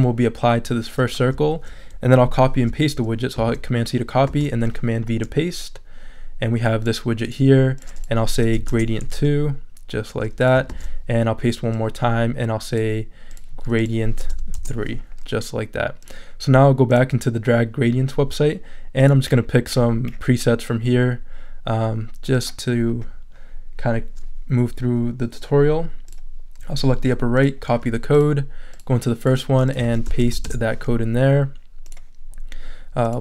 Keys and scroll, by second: 3.3 super+c, 4.3 super+v, 8.4 BackSpace, 8.5 2, 8.7 Return, 10.7 super+v, 14.2 BackSpace, 14.3 3, 14.5 Return, 29.8 super+a, 30.2 super+v, 30.4 super+Return, 31.3 Return.